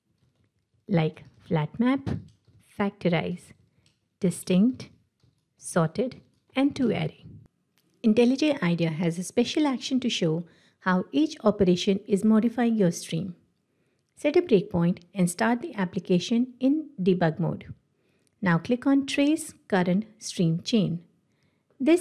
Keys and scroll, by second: 1.4 ctrl+shift+Left, 5.7 ctrl+shift+Right, 14.7 ctrl+F8, 17.2 shift+F9.